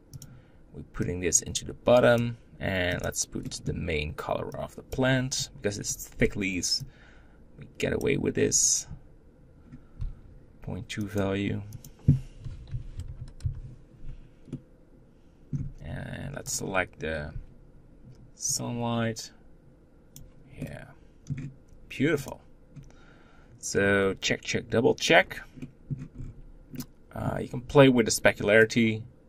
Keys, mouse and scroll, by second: 4.0-5.1 middle drag, 5.1-10.6 drag, 10.8-14.3 drag, 14.3-16.9 middle drag, 18.4-20.4 drag, 20.4 middle click, 21.1-22.0 scroll up 1, 22.0 click, 24.9-25.4 scroll down 5, 25.4 middle click, 25.9-26.5 scroll up 6, 26.5-29.2 middle drag.